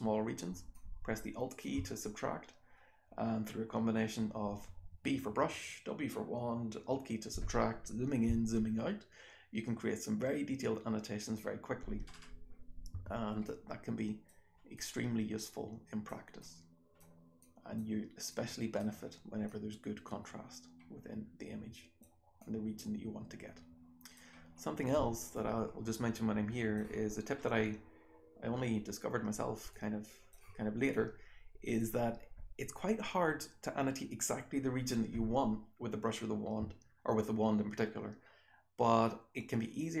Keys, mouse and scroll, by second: 0.4-1.5 alt+scroll up 1, 0.7 alt+click, 2.7-3.4 scroll down 1, 3.4 scroll up 1, 8.8-10.1 scroll up 2, 10.1-11.5 scroll up 1, 11.5-12.8 scroll up 1, 12.8 w, 13.4 click, 14.2-15.5 scroll up 1, 14.7-16.0 drag, 15.5-16.0 scroll up 1, 16.0-18.2 scroll up 1, 16.3 click, 17.3 click, 18.2-18.7 drag, 18.2-19.4 scroll up 1, 19.4-21.9 drag, 19.4-21.9 scroll up 1, 21.9-23.5 scroll up 1, 22.4-24.1 drag, 23.5-24.1 scroll up 1, 24.1-24.5 scroll up 1, 24.5-26.1 scroll down 1, 25.3-26.7 drag, 26.1-26.7 scroll down 1, 26.7-29.7 scroll down 1, 29.7-30.3 drag, 29.7-30.9 scroll down 1, 30.9-31.7 drag, 30.9-31.5 scroll down 1, 31.5-32.8 scroll down 1, 32.8-35.5 scroll down 1, 35.5-36.8 scroll down 1, 36.8-38.1 scroll down 1, 38.1-39.5 scroll down 1, 39.5-40.0 scroll down 1.